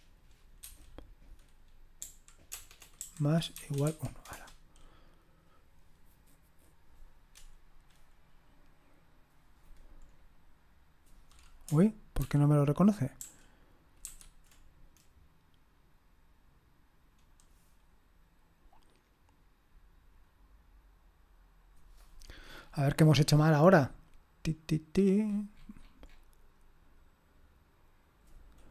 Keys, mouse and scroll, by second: 0.6 0, 3.5 =, 3.9 1, 4.3 Return, 12.2 ctrl+p, 13.2 ctrl+p, 14.0 ctrl+n.